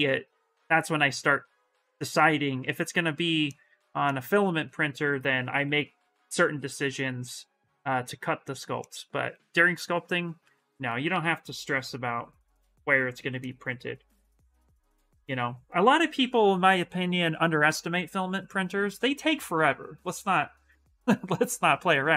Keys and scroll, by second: 4.9 s, 11.0 s, 12.3 s.